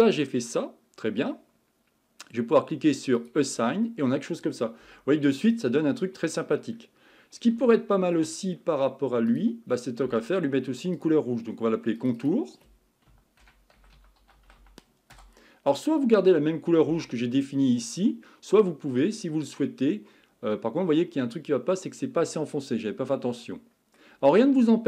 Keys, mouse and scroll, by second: 0.3-3.2 middle drag, 3.2 click, 3.8-4.8 middle drag, 4.8 Tab, 5.1-5.5 scroll down 3, 5.5-6.9 middle drag, 6.9-7.7 scroll up 6, 7.7-8.3 shift+middle drag, 8.3-9.3 scroll up 4, 9.3 click, 10.9-12.1 drag, 12.1-15.1 drag, 19.2-19.8 scroll down 2, 19.8-20.5 scroll up 2, 20.5-24.4 middle drag, 24.4-24.8 scroll down 7.